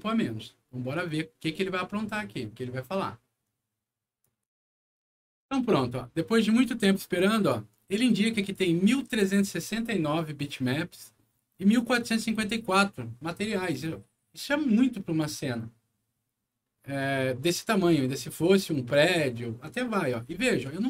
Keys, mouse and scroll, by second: 4.1 click, 8.2 click, 17.2 scroll up 1, 20.7-20.8 alt+middle drag.